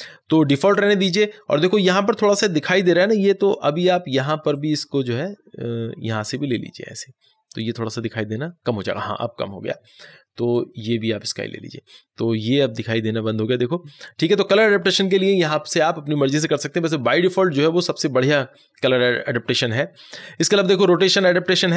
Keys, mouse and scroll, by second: 4.4 click, 4.5-10.5 drag, 10.5-21.6 drag.